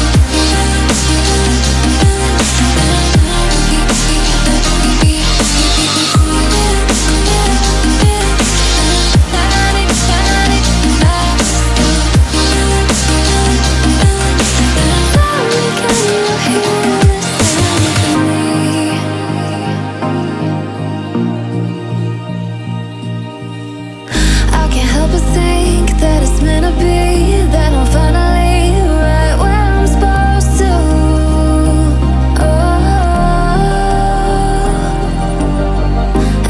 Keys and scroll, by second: 26.4 ctrl+z, 34.6 ctrl+t.